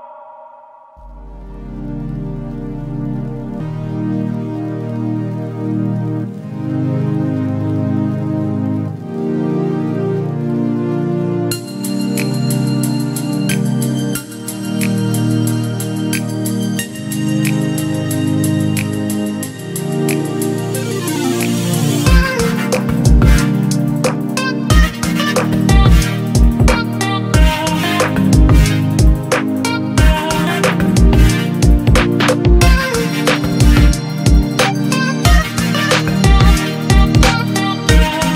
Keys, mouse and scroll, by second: 6.7 e, 9.0 ctrl+z, 16.9 e, 23.4 e, 37.7 e.